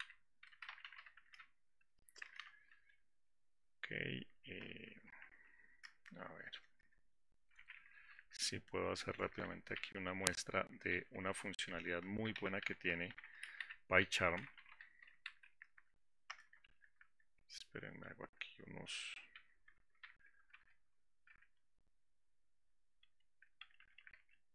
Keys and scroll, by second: 20.8 ctrl+shift+g, 24.0 Delete.